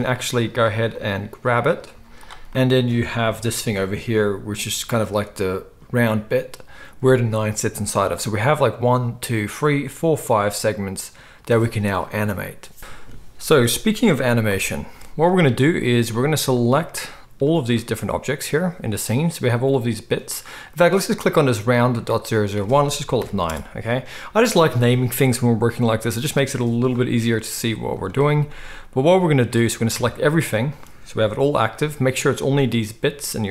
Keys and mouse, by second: 0.9 click, 1.9 z, 2.5-17.4 middle drag, 2.5 g, 3.2 g, 14.5 n, 15.8 z, 17.4-22.0 drag, 22.0 middle click, 22.1-33.5 drag, 27.6 z, 29.9 a, 30.4 z, 31.2 g.